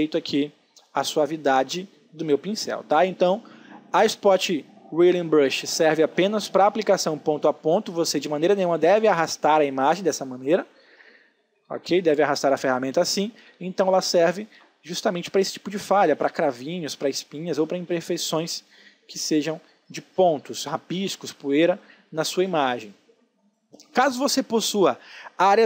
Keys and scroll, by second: 11.1 ctrl+z, 13.5 space, 24.5 space.